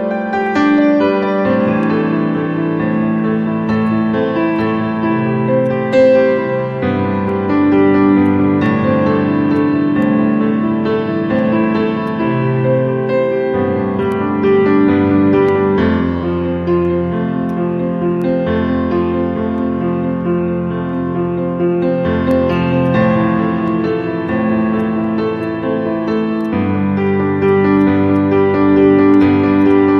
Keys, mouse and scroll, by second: 4.6 alt+click, 5.6 alt+click, 7.4-8.1 scroll up 1, 11.2-12.0 scroll up 1, 12.0 alt+click, 13.6 scroll down 1, 14.3 alt+click, 15.0 scroll up 1, 16.4 scroll down 1, 21.0 scroll down 1, 21.6-21.9 scroll up 1, 21.9-22.5 scroll down 1, 22.8 alt+click, 24.4-25.0 alt+scroll down 2, 25.0 alt+click, 26.1 scroll down 1, 26.9 ctrl+z, 27.8 right click, 29.6 double click.